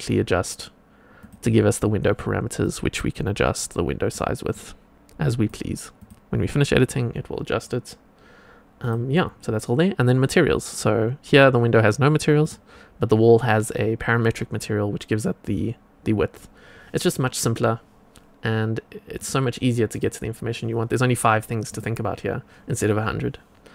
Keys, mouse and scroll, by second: 1.1 click, 2.6-4.1 drag, 4.4 click, 5.9 click, 7.5-8.7 scroll down 1, 8.7 click, 8.7 scroll down 2, 12.4 click, 19.1 click, 19.8 click, 21.6 click.